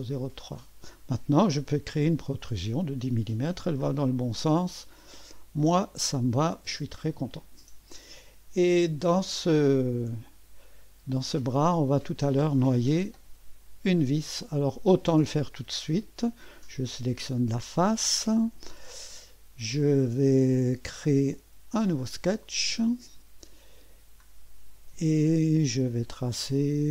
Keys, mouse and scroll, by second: 1.9 click, 2.3 click, 5.7 click, 7.1-10.5 drag, 12.6-13.1 scroll up 1, 16.7 click, 22.4 click.